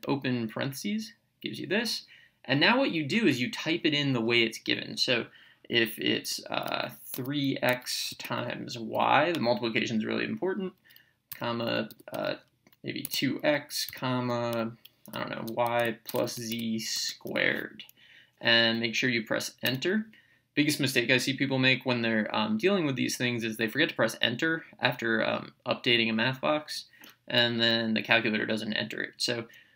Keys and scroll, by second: 0.0 (, 6.2 3, 7.1 x, 8.1 *, 8.9 y, 11.3 ,, 11.9 2, 13.0 x, 13.9 ,, 15.1 y, 16.2 z, 16.9 ^, 17.3 2, 19.6 Return.